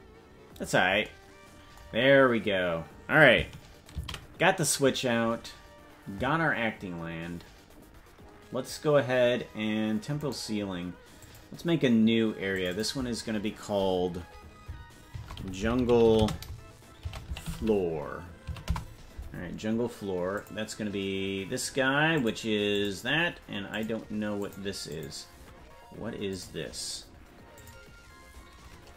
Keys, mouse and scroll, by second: 12.5-17.9 drag, 12.5 right click, 17.9 o, 22.2-28.9 drag.